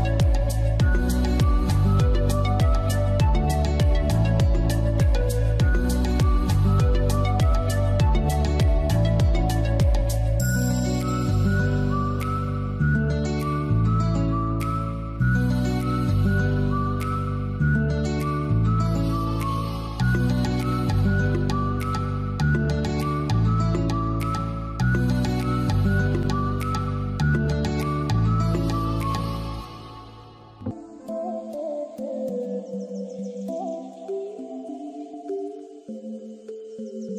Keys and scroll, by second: 28.3 ctrl+d.